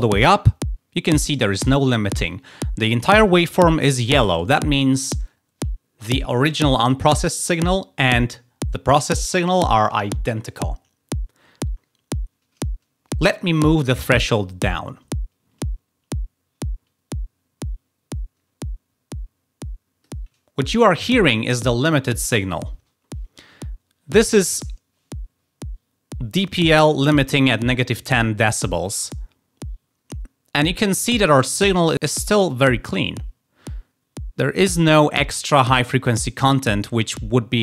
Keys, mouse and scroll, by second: 14.4-20.1 drag.